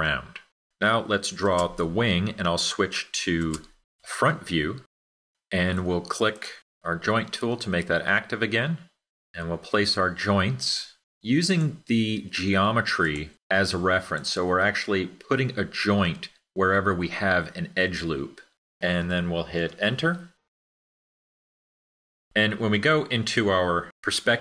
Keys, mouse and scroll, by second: 19.3 Return.